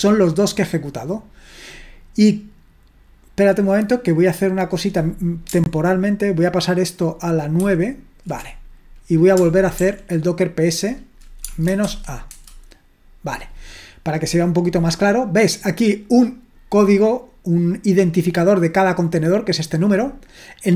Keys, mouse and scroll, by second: 7.7 super+), 9.8 ctrl+p, 11.4-12.3 typing, 16.1-17.2 drag, 19.8 click.